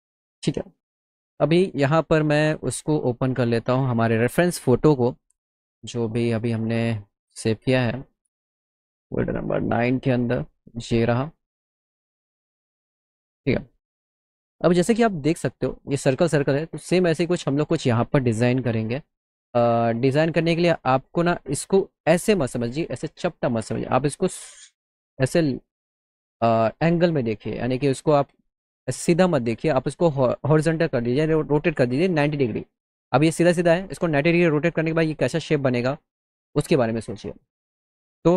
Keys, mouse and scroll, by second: 0.0 click, 0.3 click, 0.6 click, 4.0 click, 6.2 click, 7.5 click, 7.6 click, 8.6 middle click, 9.6 click, 9.7 click, 10.6 click, 10.9 click, 12.4 click, 17.3 click, 17.3 right click, 19.9 middle click.